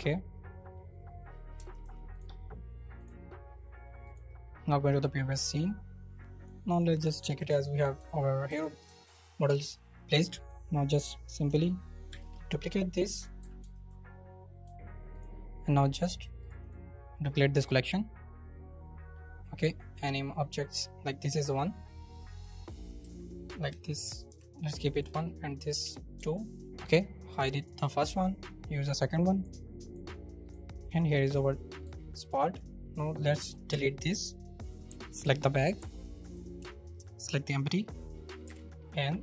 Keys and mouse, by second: 4.0 click, 6.4 right click, 7.3 shift+right click, 8.1 shift+right click, 8.4 z, 10.3 right click, 12.1 shift+d, 13.1 middle click, 13.4 z, 13.7 shift+click, 14.6 g, 15.1 click, 16.4 click, 16.6-17.6 drag, 23.0 F2, 25.1-26.6 drag, 27.6 click, 28.7 drag, 29.3 click, 31.8 g, 33.7 Delete, 34.6 click, 34.9 z, 35.5 click, 35.8 z, 36.2-36.6 drag, 37.2 shift+click, 38.6 ctrl+p.